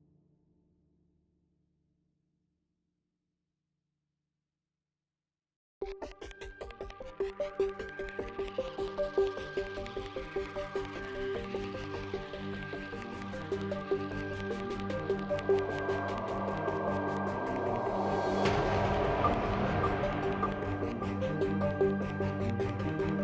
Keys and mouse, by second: 0.1 KP_Decimal, 0.3 click, 0.8 ctrl+x, 1.0 Tab, 1.5 Tab, 2.5 Tab, 2.8 Tab, 3.8 shift+e, 4.0 Tab, 5.1 t, 5.3 click, 5.4 t, 5.7 Tab, 5.9 Tab, 6.0 KP_7, 6.5 z, 7.2 Tab, 7.8 k, 11.2 click, 12.0 click, 12.2 k, 12.8 ctrl+r, 12.9 click, 13.7 k, 16.7 ctrl+Tab, 17.0-17.4 drag, 17.4 j, 17.9 z, 18.3 ctrl+r, 19.0 ctrl+r, 19.3 z, 19.5 KP_7, 20.8 k.